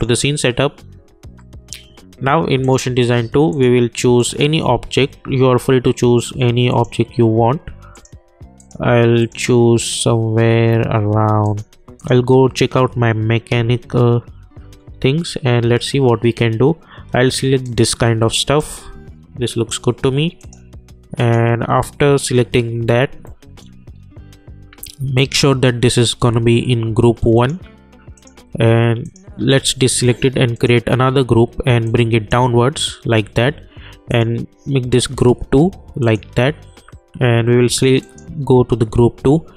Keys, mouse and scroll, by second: 2.6 click, 6.7 click, 14.0 scroll down 1, 17.6-20.4 drag, 18.9-19.8 drag, 23.5-23.9 alt+middle drag, 23.9-24.4 scroll up 2, 25.1-34.1 drag.